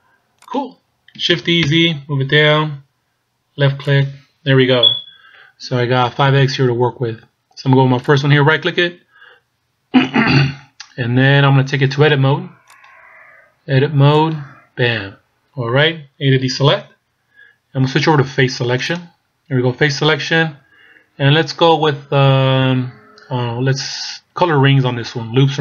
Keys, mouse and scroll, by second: 1.4 shift+d, 8.1 right click, 12.7 click, 14.5 click, 15.2-16.0 scroll up 2, 16.5 a, 18.9 click.